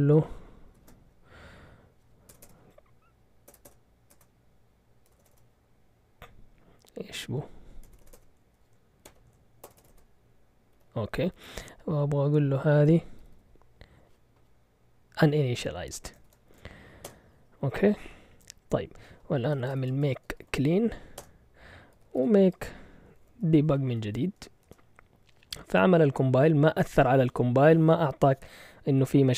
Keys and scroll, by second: 0.0-0.7 typing, 2.3 typing, 3.6-5.3 typing, 8.0-9.9 typing, 9.0 Escape, 10.7 Down, 11.2 Right, 11.8 Right, 11.9 Right, 13.2 typing, 15.9 Escape, 16.2 typing, 17.0 Return, 19.3-24.6 typing.